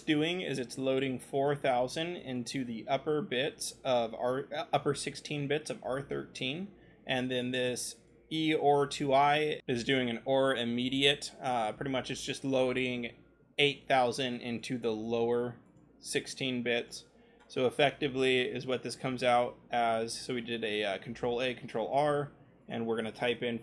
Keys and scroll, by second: 18.5 r.